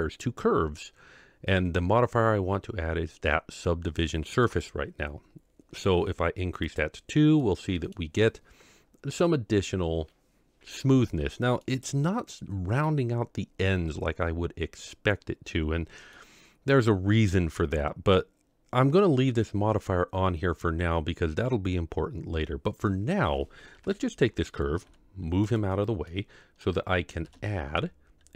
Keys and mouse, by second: 0.2-4.6 drag, 6.7 click, 7.4-7.9 middle drag, 11.7-12.0 middle drag, 16.1-16.7 middle drag, 23.7 KP_7, 24.8 g, 26.0-26.6 middle drag, 27.2 shift+a.